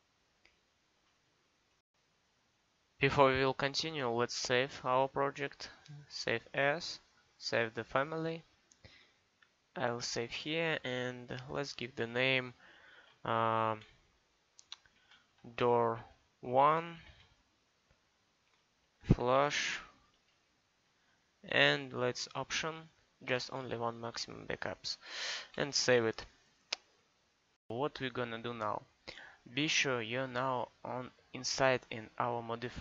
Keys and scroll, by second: 15.0-17.0 typing, 18.5-19.6 typing, 23.3 1.